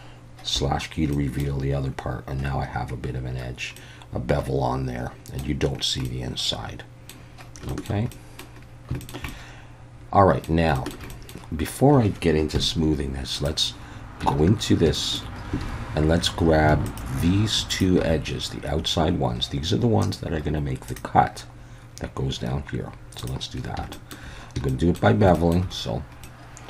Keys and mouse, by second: 0.5 /, 1.1 middle click, 3.8-5.4 middle drag, 6.0-7.1 middle drag, 7.7 shift+middle drag, 8.1-8.4 middle drag, 9.0 shift+middle click, 9.3-10.4 middle drag, 10.7 shift+middle drag, 11.1 middle click, 12.5 KP_1, 13.3 click, 14.2 Tab, 14.9 shift+middle click, 15.6 alt+a, 16.8 alt+shift+click, 17.8 alt+shift+click, 23.9 shift+middle click, 24.7 shift+middle click, 25.4 shift+middle click, 26.2 middle click.